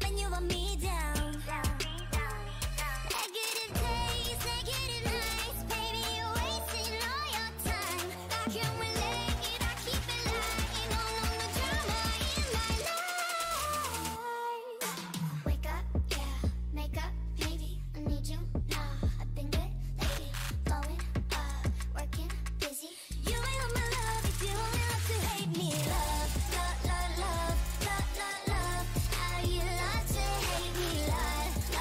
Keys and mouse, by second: 1.0 s, 1.9 g, 3.0 s, 3.7 g, 6.9 KP_7, 8.3-9.4 drag, 9.2 s, 10.6 z, 12.2 g, 14.1-15.4 middle drag, 15.4 click, 16.2 g, 17.3 a, 18.8 ctrl+r, 19.9 click, 20.0 a, 20.0 right click, 21.2 o, 22.0 right click, 22.2 g, 23.7 g, 24.9 g, 26.2 g, 27.4-30.4 typing, 29.8-31.8 drag.